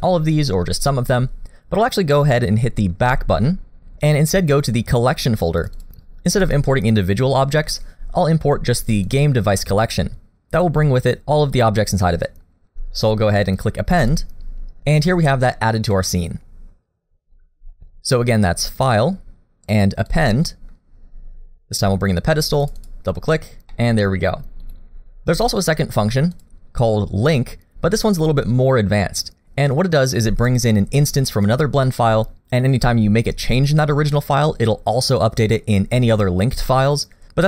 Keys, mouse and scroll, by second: 15.4 scroll up 2, 15.9 middle click, 22.6 click, 23.7 middle click, 24.6 click, 26.3 click.